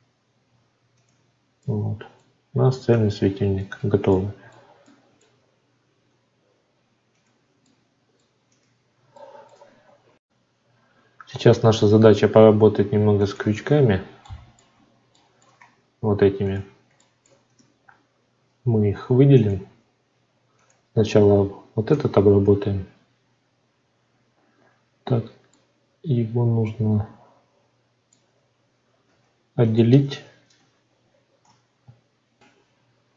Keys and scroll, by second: 3.7 ctrl+z, 17.5 Tab, 30.5 Tab, 32.6 F9.